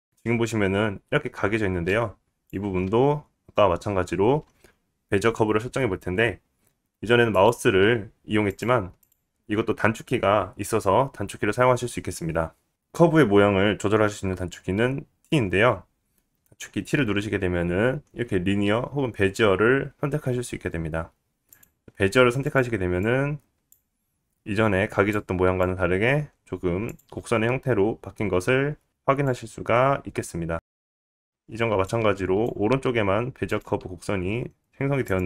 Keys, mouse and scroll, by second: 0.1 scroll down 1, 0.1 middle click, 1.1 scroll up 2, 1.1-1.5 right drag, 1.5 scroll down 2, 1.6-2.8 right drag, 4.0-4.9 drag, 4.2-4.9 middle drag, 4.2-4.9 right drag, 9.5 right click, 11.2-17.4 right drag, 17.4 t, 24.6 click, 25.1-28.1 drag, 28.1-29.0 scroll up 5, 28.5 click, 31.3 click, 32.9-35.2 drag.